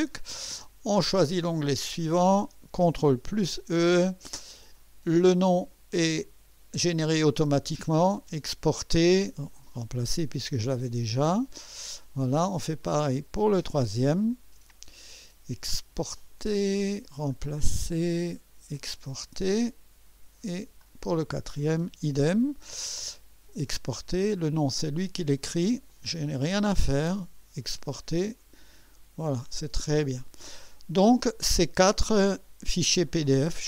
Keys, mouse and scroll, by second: 1.8 click, 3.3 ctrl+e, 8.3 click, 9.5 click, 10.8 click, 12.9 click, 14.4 ctrl+e, 16.2 click, 17.4 click, 18.8 click, 20.8 click, 22.0 ctrl+e, 24.1 click, 25.9 click, 28.1 click, 33.1 click.